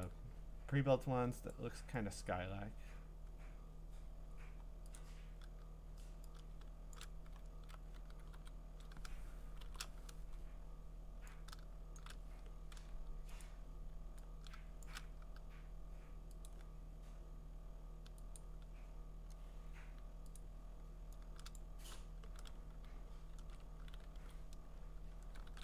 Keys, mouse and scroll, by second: 0.0 click, 1.5 click, 2.1 click, 2.8-4.5 scroll, 5.0 click, 7.0 shift+click, 7.4-7.8 scroll, 8.3 g, 9.6 alt+shift+n, 12.0 shift+click, 13.4 click, 14.8 shift+click, 16.5 click, 17.0-18.4 scroll, 18.4 click, 18.4-19.4 scroll, 20.4 click, 21.6 shift+click, 23.4 ctrl+z, 24.1 g.